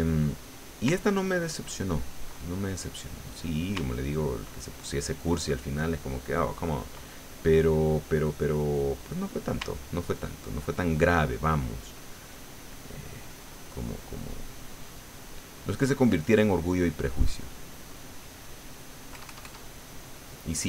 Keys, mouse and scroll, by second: 0.5 click, 1.0-2.3 ctrl+drag, 2.4 ctrl+middle click, 3.3 middle click, 3.9-7.0 ctrl+drag, 7.0 ctrl+middle click, 8.0-9.5 middle drag, 9.7-15.9 ctrl+drag, 15.9 ctrl+middle click, 16.8 click, 17.6 click, 19.1 KP_Add, 19.8 click, 20.0 middle click.